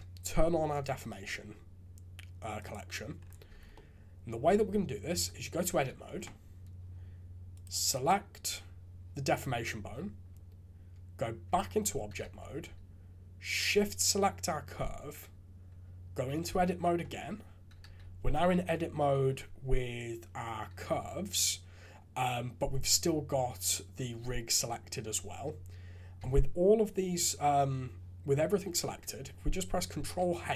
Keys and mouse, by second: 0.7 click, 2.5 click, 3.5 shift+z, 4.4 click, 5.1 Tab, 5.7 shift+z, 7.5 click, 7.9 click, 11.4 Tab, 12.2 shift+z, 17.0 Tab, 17.8 shift+z, 18.3 click, 26.2 a, 29.8 ctrl+h.